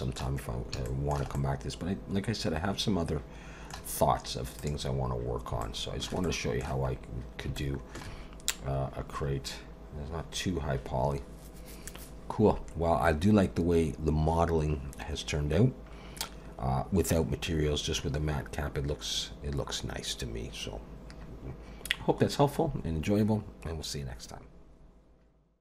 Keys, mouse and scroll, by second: 0.8 shift+middle click, 1.3 middle click, 4.6 click, 5.6 shift+middle click, 6.2 middle click, 6.9 scroll up 1, 7.6 shift+middle click.